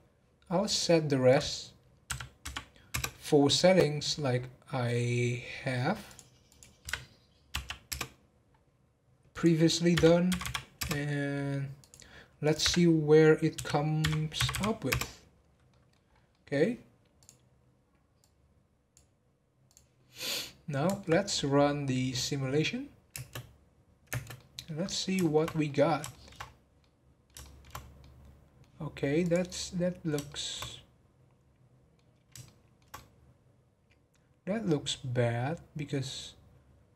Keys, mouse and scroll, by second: 1.3-3.3 drag, 3.3-4.4 scroll down 13, 4.9 scroll down 5, 6.0 click, 6.5-8.3 drag, 8.3 scroll down 1, 9.3-10.4 drag, 10.4 m, 11.8 click, 12.4-14.5 drag, 14.5 m, 15.3 scroll down 1, 15.6-16.1 middle drag, 16.1 scroll up 2, 16.3-17.1 middle drag, 17.1-20.2 drag, 20.2-23.1 middle drag, 23.1 space, 24.1 space, 24.3-25.5 middle drag, 25.5 scroll up 1, 25.6-26.4 middle drag, 26.4 scroll up 3, 26.8-27.7 middle drag, 27.7 scroll up 2, 27.9-36.0 middle drag.